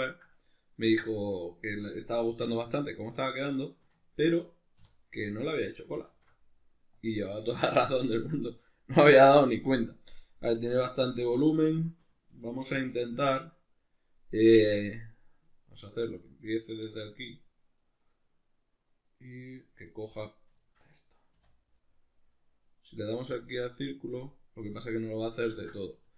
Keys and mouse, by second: 4.8 3, 5.0 right click, 5.4 right click, 6.1 alt+q, 7.5-15.4 shift+middle drag, 12.7 1, 15.4 right click, 16.3 ctrl+right click, 16.7 ctrl+right click, 17.0 ctrl+right click, 17.4 ctrl+right click, 17.8 ctrl+right click, 19.5 ctrl+right click, 19.7 ctrl+right click, 19.9 ctrl+right click, 20.6-26.1 shift+middle drag, 21.4 w, 25.5 ctrl+z, 26.0 Tab.